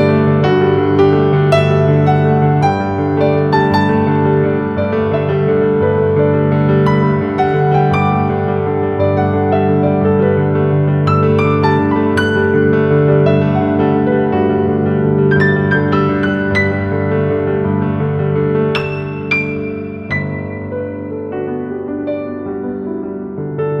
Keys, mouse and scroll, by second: 1.9-3.4 typing, 4.2 click, 7.1 click, 8.2 Left, 10.3 click, 14.3 typing, 15.6 typing, 16.7 click, 21.9 scroll up 1, 22.1-23.8 typing, 22.5 click, 23.1 click, 23.4 click.